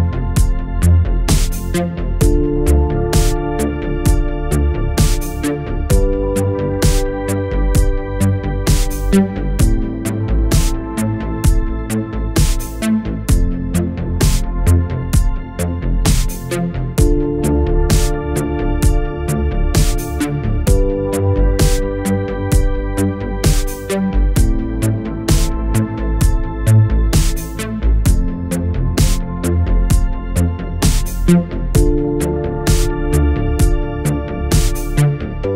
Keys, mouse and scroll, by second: 1.4 click, 2.0 r, 4.4 r, 5.0 alt+click, 6.3-8.2 typing, 9.7 click, 11.5 right click, 12.4 click, 13.5 shift+click, 15.7 ctrl+Num_Lock, 15.8 ctrl+v, 16.9-19.9 click, 24.8 space, 31.2 space, 32.2-33.1 click.